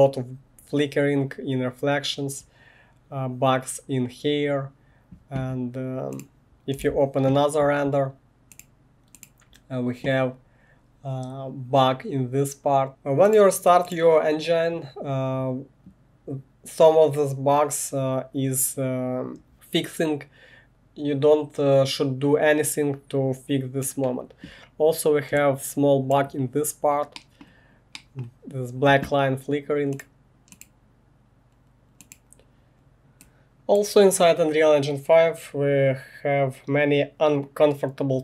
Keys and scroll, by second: 7.0 1.